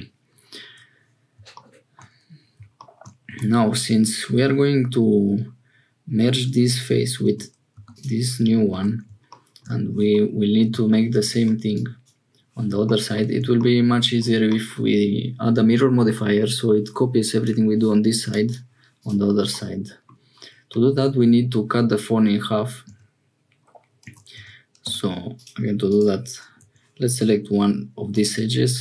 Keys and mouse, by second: 3.2 Tab, 7.2 Tab, 7.7 3, 8.7 Tab, 10.1 middle click, 11.7 click, 17.3-18.5 drag, 19.5 click, 22.9 Tab, 24.0 Tab, 24.3 Tab, 24.8 2, 25.3-27.3 drag.